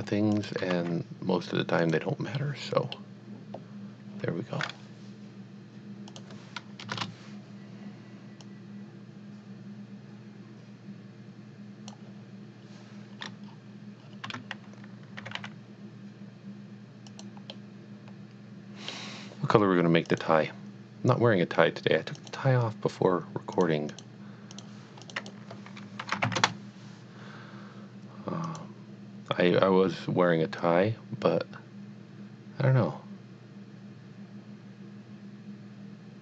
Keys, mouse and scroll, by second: 0.3 shift+click, 0.7 typing, 1.8 click, 2.5 middle click, 2.7 middle click, 6.1 click, 6.8 KP_0, 6.9 KP_Enter, 8.4 click, 8.7 click, 12.7 click, 13.2 scroll up 1, 13.6 scroll down 1, 14.3 scroll down 1, 14.4 Tab, 15.2 g, 15.7 y, 17.1 click, 17.8-19.0 middle drag, 20.1 click, 22.2 click, 23.6 click, 23.9 click, 24.5 click, 25.0 click, 25.2 double click, 26.0 shift+t, 26.3 Return, 28.5 click, 30.6 click.